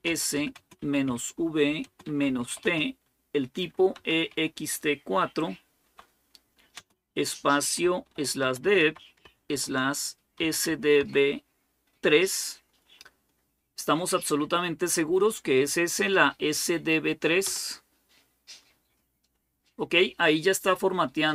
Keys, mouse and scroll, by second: 0.0-4.1 typing, 5.6-6.6 typing, 7.9-10.8 typing, 11.8 typing, 17.2 Return.